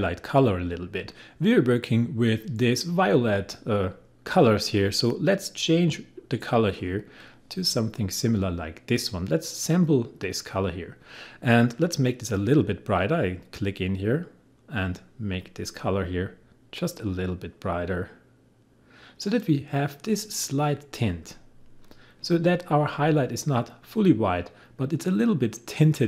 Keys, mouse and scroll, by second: 6.8 click, 10.2 click, 15.9-21.8 drag.